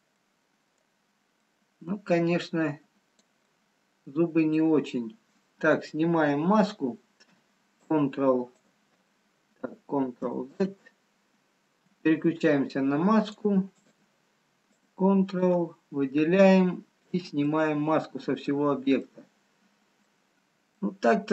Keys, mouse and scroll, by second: 1.0 click, 1.0 middle click, 1.9 middle click, 2.7 click, 3.5 middle click, 6.3-6.8 scroll down 5, 7.8 ctrl+click, 10.6 ctrl+z, 14.8 ctrl+click, 16.1-17.0 scroll up 2, 17.2-17.8 scroll up 1, 17.8 middle click, 18.7-19.2 scroll up 1, 19.5 middle click, 20.2-20.8 scroll up 2.